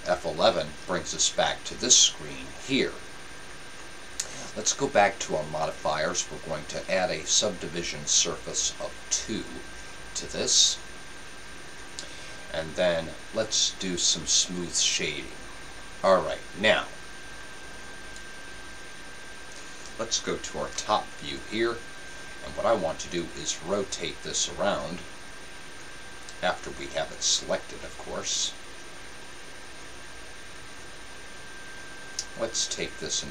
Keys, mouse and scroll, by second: 0.0 F11, 9.5-20.7 drag, 20.7 KP_7, 23.5-26.5 drag, 26.5-32.1 right drag, 32.1-33.3 drag.